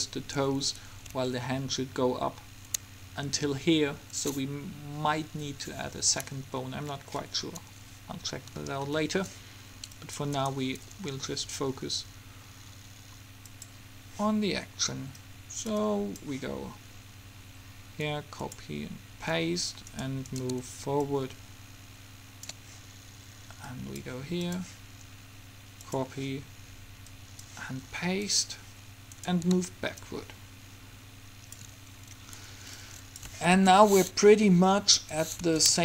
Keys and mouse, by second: 10.0-12.1 middle drag, 13.5-17.6 drag, 18.5-20.0 drag, 20.0-22.6 right drag, 20.4 click, 21.2-23.1 drag, 23.8-30.0 drag, 29.3 right click, 31.0 click, 33.0 click, 33.7 alt+a, 35.0 Escape.